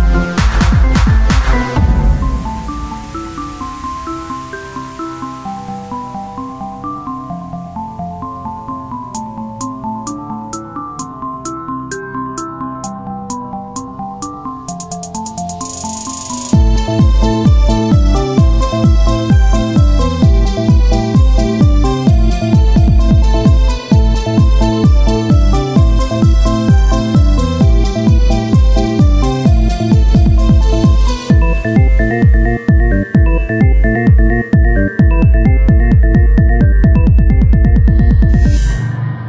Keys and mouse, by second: 0.5 s, 3.7-8.4 drag, 6.2 z, 8.8 KP_1, 9.1 z, 11.3 click, 11.4 z, 11.8 c, 12.4 z, 12.6 c, 14.8 click, 14.8 right click, 15.1 z, 15.6 right click, 16.0 z, 16.4 c, 16.7-19.7 drag, 19.7 z, 20.6 shift+d, 21.9-26.0 drag, 26.0 KP_1, 28.9 KP_1, 29.4 z, 29.9 z, 31.2 KP_1, 32.3-33.5 drag, 32.7 z, 33.5 shift+d, 35.1-38.8 drag, 35.9 z, 38.3 r, 39.1 z.